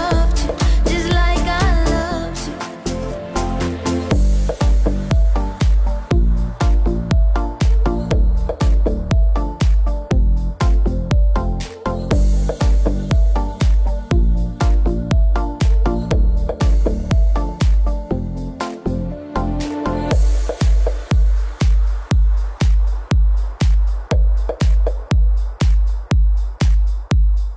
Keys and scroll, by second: 18.6 ctrl+j.